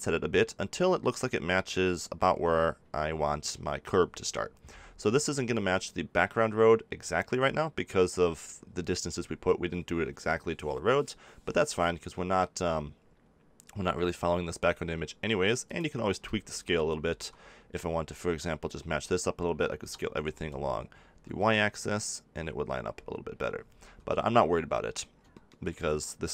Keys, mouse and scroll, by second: 15.7-16.8 drag, 16.8 a, 17.1 a, 19.8 s, 24.8-26.3 middle drag.